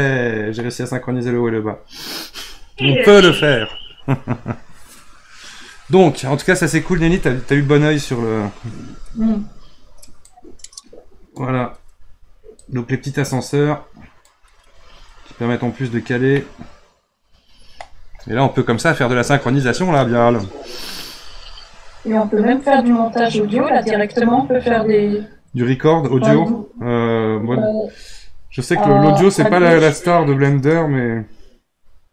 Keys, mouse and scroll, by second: 10.2-14.7 drag, 14.7 scroll up 3, 15.2 scroll down 3, 16.3-19.5 middle drag, 29.7 click.